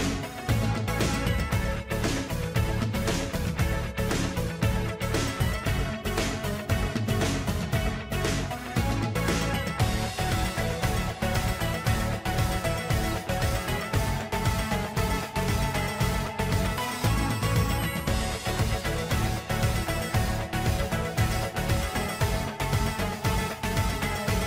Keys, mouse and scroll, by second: 0.0-19.0 typing.